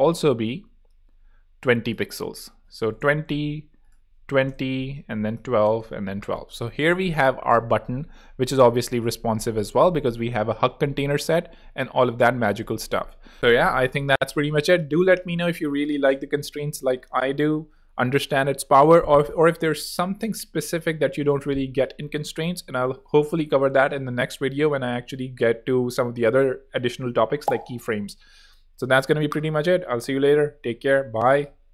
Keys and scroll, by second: 0.9 super+z, 2.3-4.8 typing, 5.6 Return, 9.2-10.4 typing, 10.6 super+d, 10.7 super+z, 13.3 super+x.